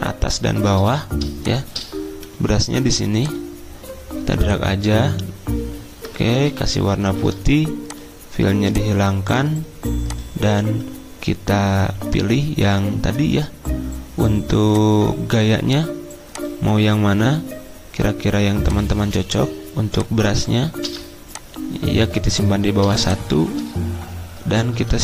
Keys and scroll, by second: 2.3 p, 6.4 d, 7.0 x, 9.0-9.8 typing, 20.8 v, 22.9 ctrl+[.